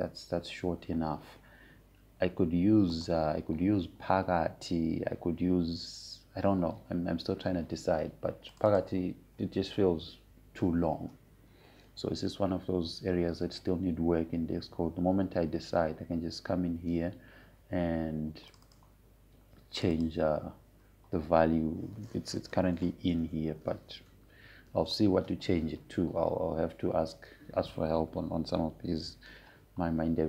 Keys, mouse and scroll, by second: 4.6 click, 10.2 click, 16.5-17.0 scroll down 1, 17.0-18.9 scroll up 1, 20.2 click, 24.0 typing, 26.0 ctrl+z.